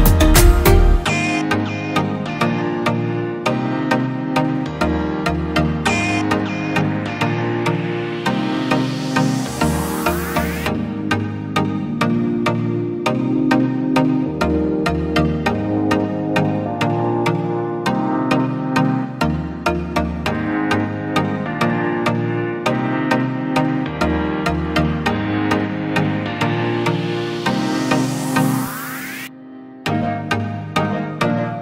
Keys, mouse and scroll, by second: 3.3 typing, 17.3 alt+right click, 18.3-20.0 scroll down 1.